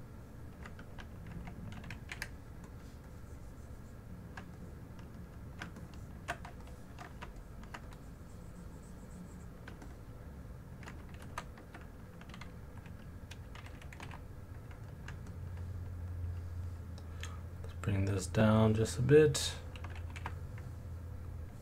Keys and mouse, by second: 2.1 f, 3.1 click, 4.6 alt+middle click, 5.8 ctrl+alt+click, 6.6 alt+shift+click, 7.4 alt+click, 7.9 click, 9.9 middle click, 9.9 alt+click, 11.2 ctrl+z, 13.7 g, 14.0 f, 15.3 alt+click, 17.5 click, 18.0 click, 20.2 f.